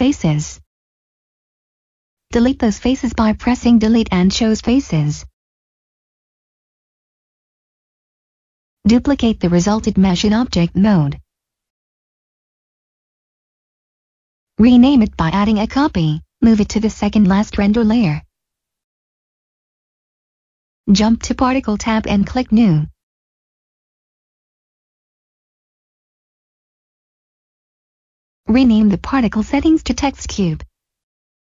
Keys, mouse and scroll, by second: 0.0 middle click, 0.7-1.3 scroll down 1, 1.3 middle click, 2.5 Delete, 3.8 click, 4.8 middle click, 8.7 Tab, 11.4 shift+Num_Lock, 11.9 d, 13.3 right click, 13.5 click, 13.8-14.8 typing, 15.5 Return, 17.0 m, 19.9 click, 23.7 click, 28.5-31.2 typing.